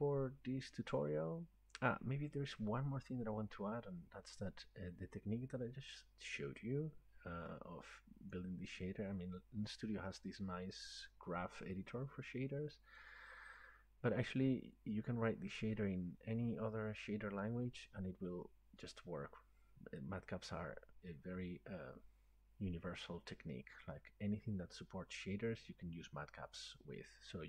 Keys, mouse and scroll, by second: 13.0-18.1 middle drag.